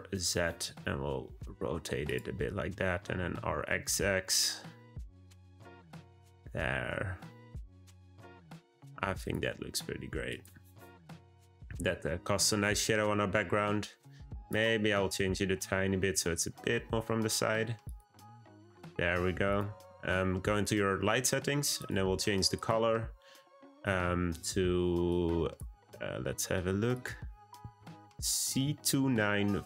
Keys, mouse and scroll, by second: 2.9 r, 10.2 click, 14.4 click, 14.8 r, 19.5 click, 21.7 click.